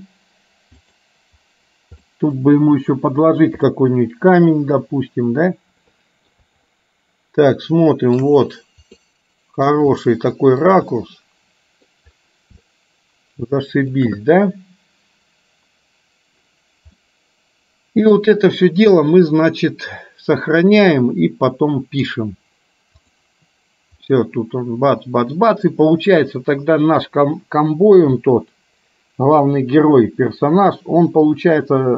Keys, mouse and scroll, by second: 2.3 middle click, 3.8-6.4 middle drag, 6.9-8.4 shift+middle drag, 9.0 middle click, 10.1 shift+middle click, 11.0-12.0 middle drag, 12.6-14.1 shift+middle drag, 17.0-18.3 middle drag, 19.1-22.3 middle drag, 23.1 click, 24.1-27.3 middle drag.